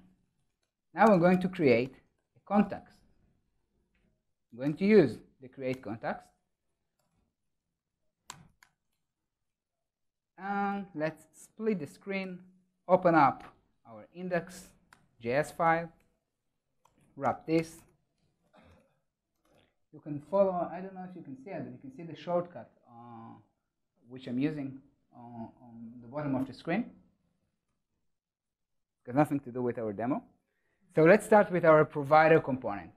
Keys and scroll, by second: 5.6 Return, 12.2 ctrl+shift+super+o, 15.5 super+1, 17.4 super+-, 27.6 super+s, 31.3 ctrl+alt+shift+Left.